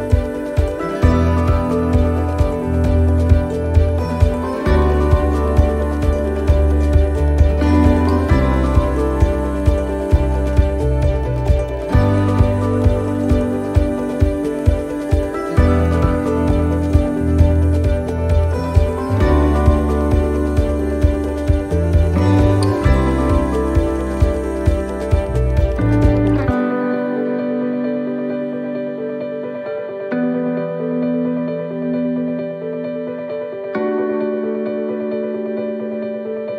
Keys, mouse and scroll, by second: 0.7 shift+right click, 2.2 middle click, 3.8 shift+right click, 5.2 shift+middle click, 7.1 shift+right click, 8.5 shift+middle click, 9.9-18.8 shift+right click, 18.8 shift+middle click, 19.7 scroll up 2, 20.1 middle click, 22.3 shift+right click, 24.4 middle click, 26.8 shift+right click, 32.6 shift+right click, 34.2 middle click, 34.9 scroll down 2, 36.1 s.